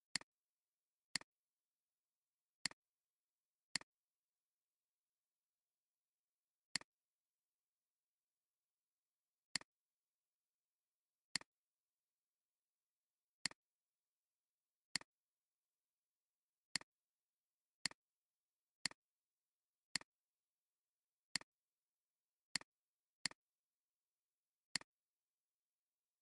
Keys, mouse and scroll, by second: 0.0 space, 0.8 alt+scroll down 1, 1.0 space, 2.0 alt+scroll down 1, 2.5 space, 2.9 alt+scroll down 1, 3.0 space, 5.1 alt+scroll up 1, 6.6 alt+shift+click, 17.5 alt+scroll down 1, 17.8 space, 19.8 space, 20.4 alt+scroll down 1, 22.2 alt+scroll up 1, 22.5 space, 23.9 alt+scroll up 1, 24.7 alt+shift+click.